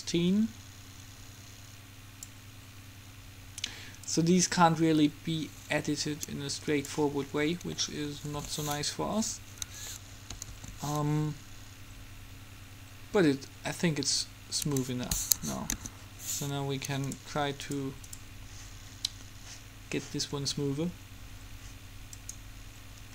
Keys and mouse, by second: 4.2-6.0 drag, 8.5 alt+a, 9.8 Escape, 10.5 alt+a, 14.7 Escape, 15.6 KP_Enter, 15.9 KP_3, 17.3-20.0 right drag, 22.4-23.1 drag.